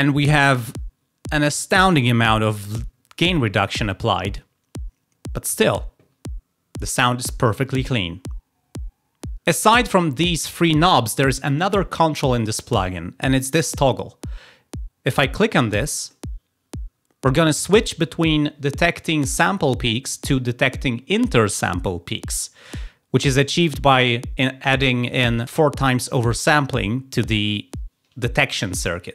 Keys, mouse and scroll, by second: 16.0 click.